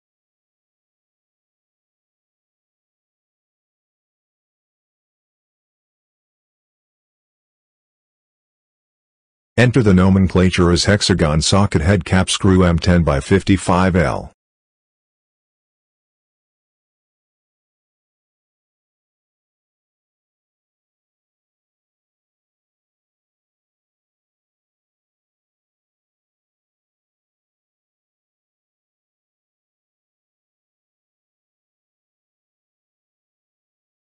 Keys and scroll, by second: 8.5 ctrl+c, 9.6 ctrl+v, 17.0 space, 17.8 s, 21.0 s, 22.2 w, 27.8 ctrl+c, 29.4 space, 29.6 -, 29.7 space, 31.4 ctrl+v.